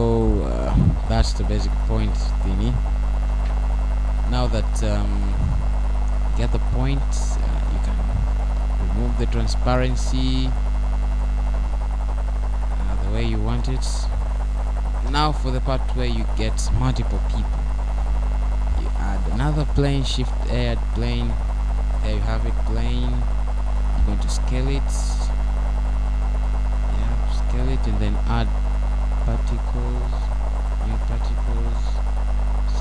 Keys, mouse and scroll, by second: 6.4 Escape, 7.3-8.1 scroll up 1, 8.1 scroll up 1, 8.5 middle click, 10.9 middle click, 11.9-12.3 scroll up 2, 12.3 middle click, 12.3 scroll down 1, 13.6-14.2 scroll up 3, 14.4 middle click, 15.6-16.3 scroll up 2, 16.9 scroll down 1, 18.7-19.0 scroll up 1, 19.0 middle click, 20.4-21.0 scroll down 3, 22.8 scroll up 1, 25.0 shift+a, 27.4 scroll down 1, 27.6 middle click, 29.5 s, 31.6 click, 31.6-32.5 scroll down 4, 32.5 middle click.